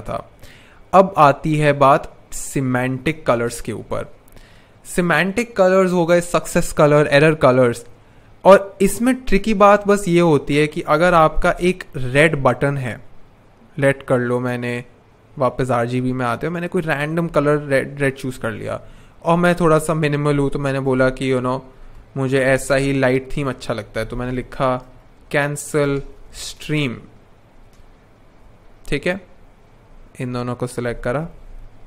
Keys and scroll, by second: 3.2 super+\, 9.3 r, 11.3 super+\, 20.0 t, 21.5-26.9 typing, 26.9 super+a, 27.9 shift+Up, 28.0 shift+Up, 31.1 alt+v, 31.3 alt+h.